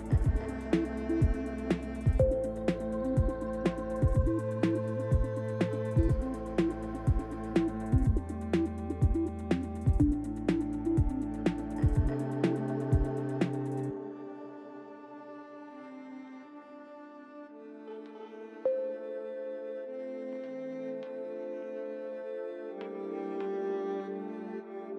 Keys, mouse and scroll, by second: 0.1 l, 1.1 click, 2.0 click, 2.6 Tab, 3.1 scroll down 3, 3.7 scroll down 4, 4.9 shift+middle click, 11.8 click, 13.4 Tab, 13.8 click, 15.0 Tab, 16.5 shift+click, 17.2 click, 18.0 shift+click, 18.9 Tab, 19.7 click, 20.9 l.